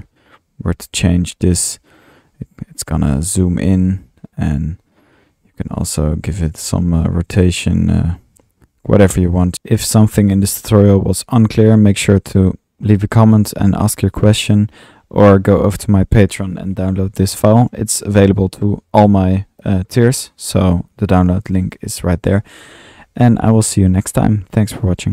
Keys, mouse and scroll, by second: 14.9-16.7 drag, 17.7 click, 18.4-18.7 drag, 18.7 middle click, 19.1 typing, 19.2-21.7 drag.